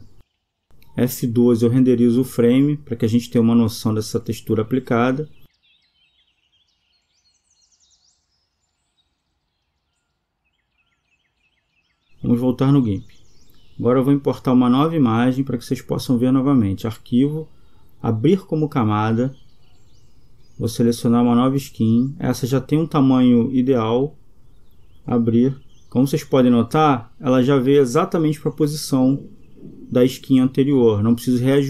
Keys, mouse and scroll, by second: 5.6 Escape, 5.6-7.2 drag, 9.8-11.7 right drag.